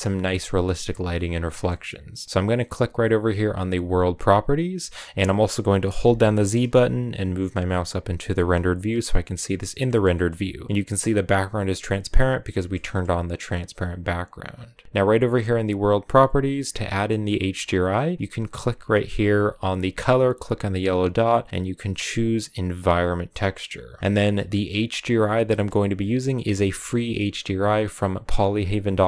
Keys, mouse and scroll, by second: 1.3-4.4 middle drag, 4.4 click, 5.9 z, 9.4-14.8 shift+middle drag, 20.9-23.9 drag.